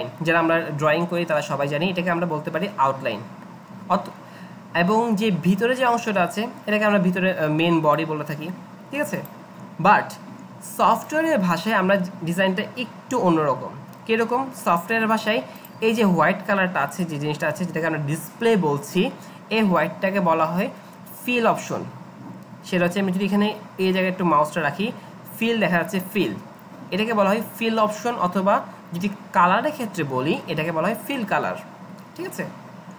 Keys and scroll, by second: 13.5-13.8 Up.